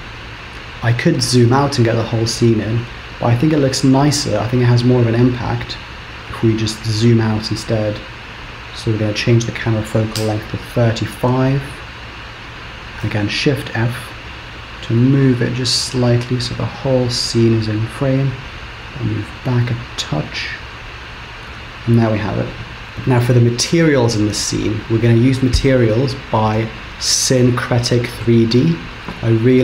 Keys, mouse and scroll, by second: 4.1 click, 6.7 click, 13.2 shift+f, 21.4 scroll up 2, 22.2 scroll up 1.